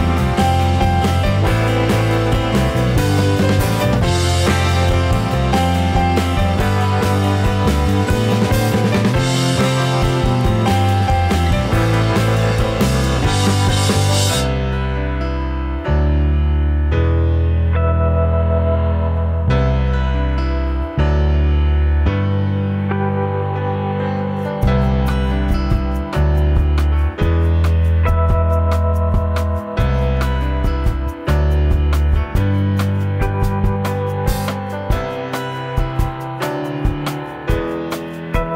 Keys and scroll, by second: 4.1 Return.